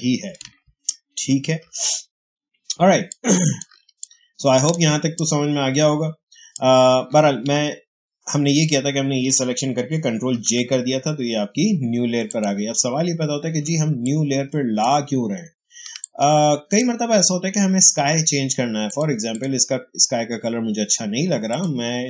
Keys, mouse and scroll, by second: 1.6 ctrl+alt+z, 2.7 space, 3.0 click, 3.0 click, 3.2 space, 3.9-7.4 ctrl+drag, 7.4 ctrl+alt+z, 10.1 ctrl+j, 12.2 click, 13.5 space, 13.9 click, 14.0 space, 15.9-18.8 ctrl+drag.